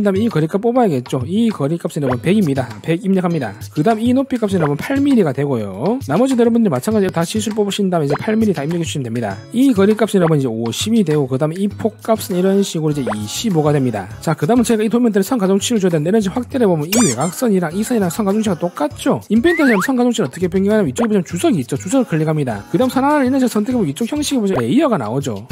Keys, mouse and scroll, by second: 0.7 click, 1.6 click, 2.1 click, 2.5 1, 4.3 click, 4.6 click, 6.1 d, 6.7 click, 7.5 click, 8.1 click, 9.6 click, 10.2 click, 10.7 5, 12.2 click, 12.8 click, 13.1 click, 13.2-14.1 typing, 17.0 scroll up 2, 17.6 click, 18.2 click, 23.8 click.